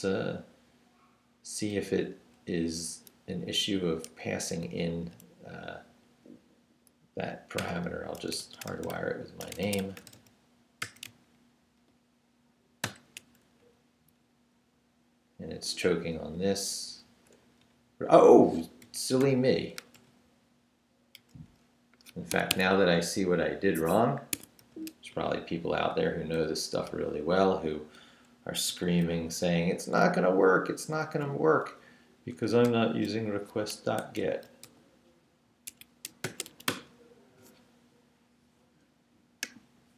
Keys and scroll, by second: 2.2 Right, 4.1 shift+d, 4.6 shift+a, 5.5 a, 7.6-10.8 typing, 12.8 shift+], 13.6 shift+Down, 14.2 Down, 15.3 Left, 16.5 Left, 17.1 Right, 17.4 Left, 18.8 i, 19.2 ., 19.8 BackSpace, 22.3 Escape, 24.3 Escape, 24.6 u, 28.7 ctrl+r, 29.2 ctrl+Left, 30.1 Left, 31.0 Left, 32.3 i, 32.6 ., 33.8-37.0 typing, 35.7 Escape.